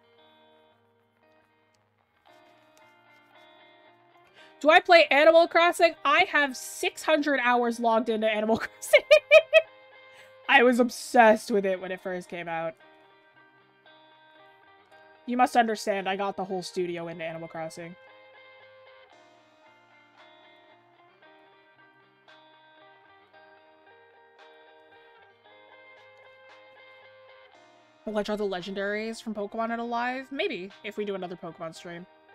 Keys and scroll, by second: 8.9 ctrl+z, 18.3 ctrl+z.